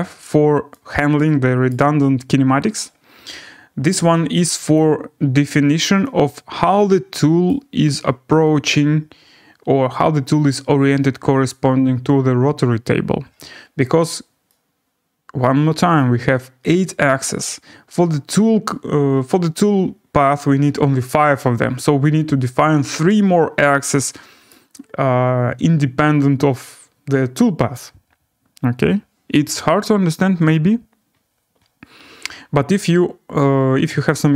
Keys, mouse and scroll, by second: 0.3 scroll, 1.7 right click, 3.8 scroll, 4.7 click, 7.5 right click, 16.0 right click, 17.6 scroll, 18.5 scroll, 19.0-19.9 scroll, 24.5 right click, 28.1-29.5 right drag, 33.2 scroll, 33.3-34.0 scroll down 6, 34.0-34.3 scroll.